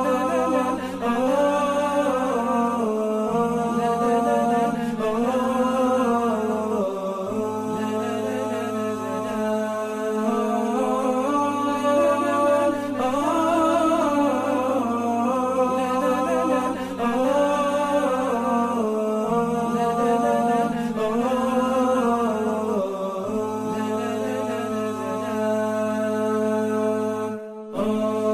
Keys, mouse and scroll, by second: 0.1 double click, 4.9 ctrl+[, 6.4 ctrl+shift+], 7.1 double click, 10.1 alt+scroll up 1, 11.8 alt+scroll up 1, 11.9-12.5 alt+scroll down 1, 13.5-14.1 alt+scroll, 14.1 double click, 16.9 alt+scroll down 1, 19.4-21.0 typing, 22.4 typing, 23.2 Return.